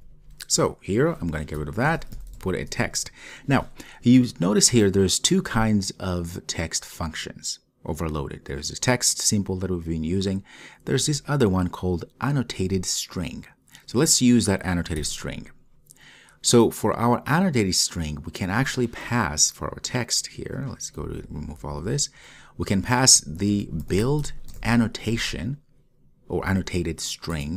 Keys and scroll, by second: 15.3 Return.